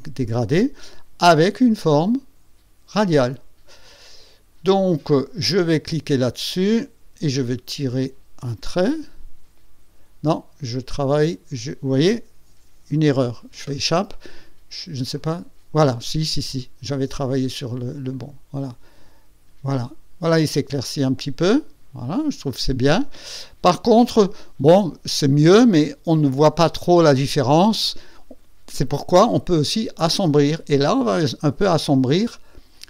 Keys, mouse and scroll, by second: 1.6 click, 2.9 click, 7.2-11.1 drag, 13.5 Escape, 15.1 click, 18.1-23.1 drag, 26.3 ctrl+scroll up 2, 27.1 ctrl+scroll down 2.